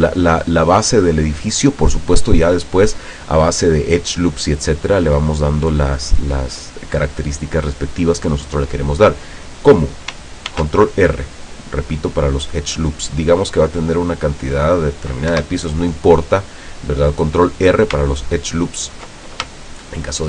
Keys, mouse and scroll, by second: 0.6-1.0 scroll up 1, 10.6 ctrl+r, 11.5-12.0 scroll up 2, 12.2 scroll up 2, 13.2-13.7 scroll down 4, 14.0 click, 15.4 Escape, 16.2 middle click, 16.5 click, 18.2-19.3 ctrl+drag, 19.6 shift+middle click, 19.8 shift+click.